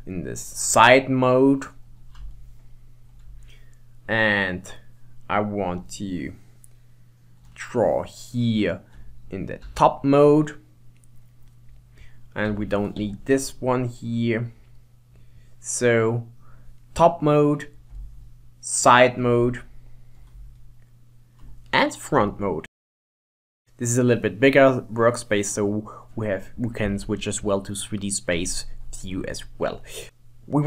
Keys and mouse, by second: 0.8 KP_3, 2.5-5.5 shift+middle drag, 5.8-8.9 drag, 9.7 KP_7, 12.5 t, 13.2 t, 15.4-18.0 drag, 18.0 shift+middle click, 20.7 shift+middle click, 22.3 shift+middle click, 23.1 middle click, 26.2 shift+middle click, 28.4 KP_1, 30.1-30.6 shift+middle drag.